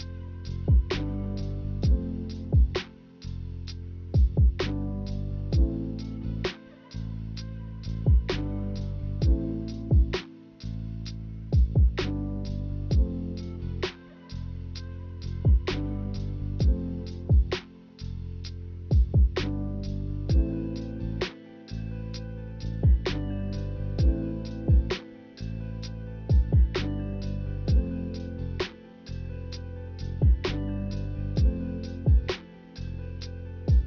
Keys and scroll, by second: 1.2-3.1 typing, 4.8-6.3 typing.